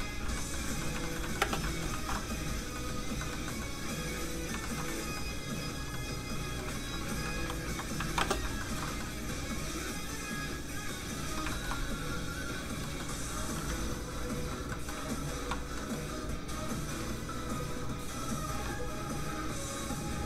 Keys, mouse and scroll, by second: 0.7 scroll down 1, 0.9 shift+middle click, 1.4 shift+space, 1.6 shift+middle click, 2.1 alt+shift+z, 2.1 middle click, 2.9 scroll up 1, 3.2 shift+middle click, 4.6 shift+middle click, 4.8 middle click, 4.9 middle click, 6.8 alt+shift+z, 7.4 ctrl+alt+z, 8.2 ctrl+shift+space, 8.6 shift+middle click, 8.8 middle click, 8.9 middle click, 9.6 click, 11.5 shift+middle click, 12.4 middle click, 12.8 middle click, 13.7 ctrl+click, 14.7 click, 14.8 middle click, 15.1 f, 15.2 click, 15.6 scroll up 1, 15.7 middle click, 16.7 click.